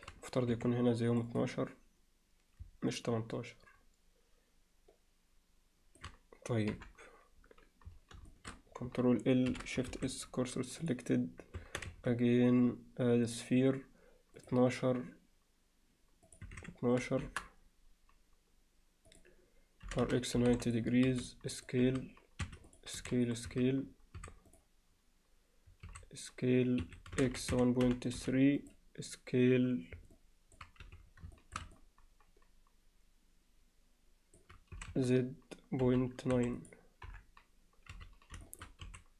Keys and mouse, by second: 0.5 2, 1.1 click, 1.3 click, 2.9-6.0 alt+middle drag, 6.7 KP_7, 8.3 alt+shift+middle click, 9.5 ctrl+l, 9.9 shift+s, 11.6 Tab, 11.9 shift+a, 16.5-19.9 drag, 19.9 r, 21.1 s, 21.5 click, 21.8 s, 22.7 click, 23.0 s, 23.5 z, 24.2 s, 25.9 s, 27.2 s, 30.1-30.6 alt+middle drag, 30.8 z, 31.4 alt+shift+middle drag, 31.8-34.4 middle drag, 34.8 s, 37.1 KP_7, 37.9 z, 38.5 alt+shift+middle click, 38.9 s.